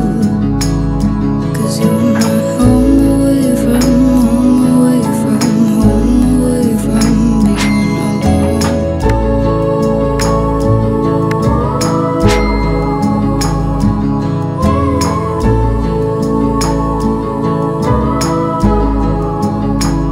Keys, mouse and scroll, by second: 4.8-5.5 middle click, 5.6-6.4 scroll down 1, 6.4-10.1 drag, 13.3 alt+click, 14.7 scroll up 1, 15.8 click, 16.6 Return, 17.2-18.6 typing, 19.4-20.1 drag.